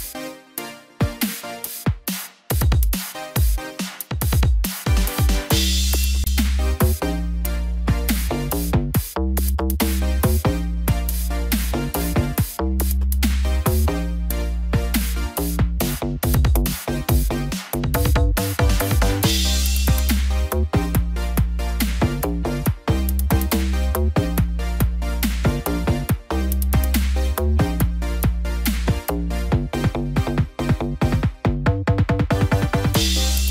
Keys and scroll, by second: 6.9 ctrl+=, 14.2 ctrl+z.